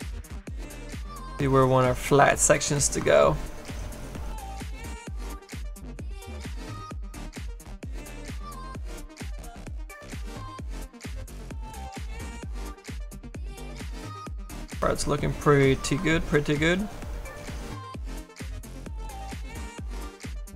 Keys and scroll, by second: 4.2 s, 4.6 s.